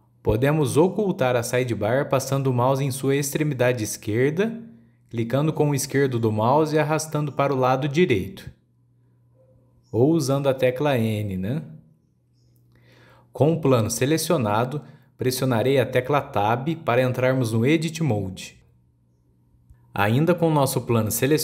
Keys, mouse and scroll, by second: 1.2-1.6 scroll down 1, 1.6-4.8 shift+middle drag, 5.7-8.7 drag, 10.8 n, 11.5 n, 12.6-13.0 scroll down 1, 13.0-14.8 middle drag, 14.8 click, 15.4 click, 16.1 click, 16.8 Tab.